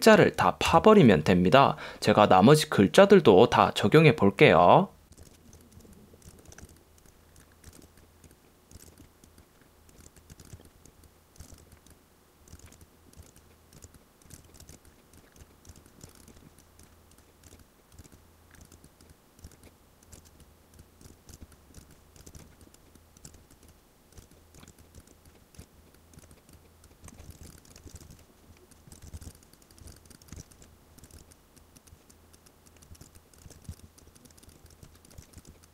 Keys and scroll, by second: 0.8 alt+super+0, 5.1 space, 5.8 v, 6.7 space, 10.0 space, 12.6 space, 14.4 super+space, 20.2 super+space, 21.1 space, 22.3 space, 23.3 super+space, 25.1 space, 25.7 space, 26.3 space, 27.4 space, 27.5 alt+super+2, 29.0 super+space, 29.1 v, 29.4 super+space, 30.0 v, 30.5 shift+m, 30.7 space, 33.1 v, 33.2 super+space, 33.9 v, 34.6 space, 35.5 super+space.